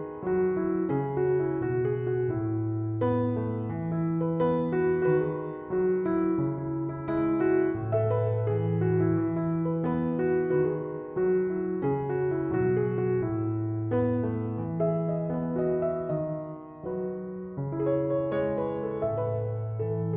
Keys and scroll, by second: 9.0 1, 11.3 /, 12.5 8, 13.2 Return, 17.7 4, 18.1 8, 20.0 1.